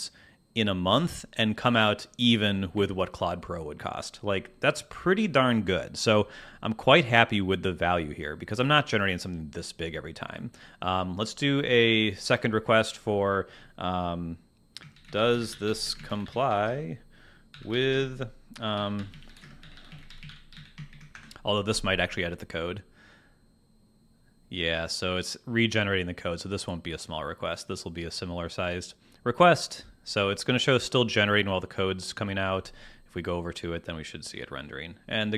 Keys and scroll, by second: 2.3 Escape, 15.3 s, 15.4 space, 18.5-20.6 typing, 21.1 Return.